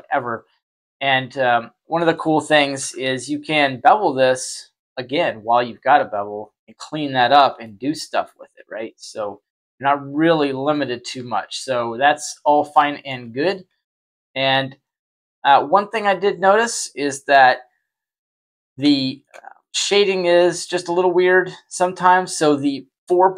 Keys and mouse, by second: 0.4 Tab, 1.0 right click, 2.7 ctrl+b, 5.8 Tab, 6.3 middle drag, 7.4 middle click, 9.0-9.5 drag, 10.3 middle click, 11.0 q, 12.5-13.0 shift+middle drag, 13.9 ctrl+z, 14.7-15.4 middle drag, 15.6 shift+middle click, 18.8-19.1 shift+middle drag, 19.5-20.6 middle drag.